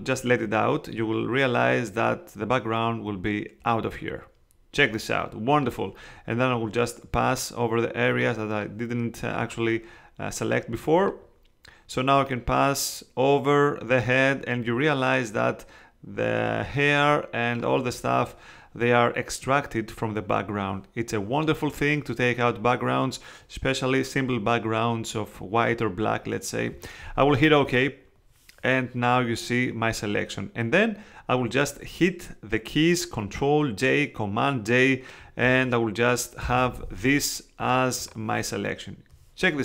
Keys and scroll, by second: 36.4 super+j.